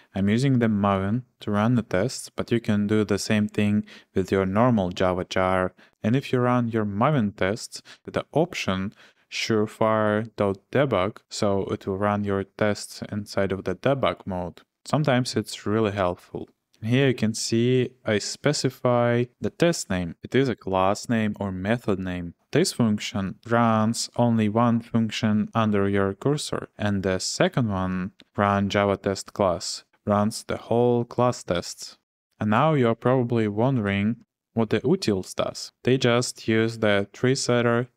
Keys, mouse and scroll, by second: 0.9 k, 27.3-27.9 j, 28.2 j, 33.3 k, 33.5 k, 33.7 k, 34.1 k.